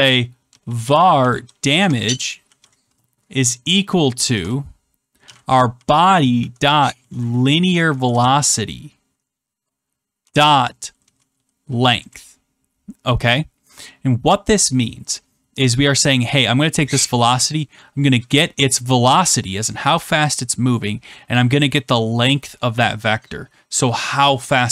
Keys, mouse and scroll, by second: 0.2-8.0 typing, 8.0 Return, 9.1 typing, 10.1-11.6 typing, 11.9 Return, 16.1 click, 16.2 click, 17.4 click, 17.5 click.